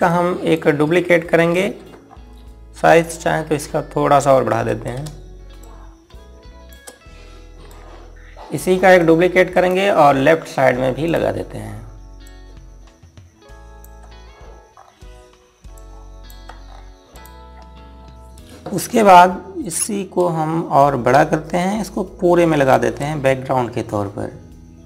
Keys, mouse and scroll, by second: 0.6 click, 2.0 ctrl+g, 2.6 scroll up 1, 3.9 scroll down 1, 4.8 scroll up 1, 6.1 shift+click, 8.1 scroll up 1, 9.5 click, 10.1 right click, 11.6 click, 15.3 scroll up 1, 16.3 click, 17.2 scroll down 1, 17.7 click, 20.2 click, 21.3 click.